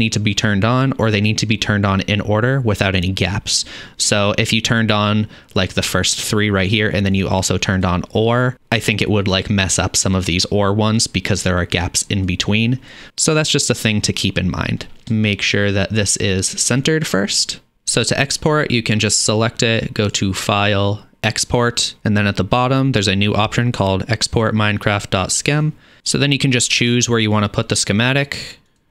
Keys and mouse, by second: 17.7-20.2 middle drag, 20.2-28.9 drag.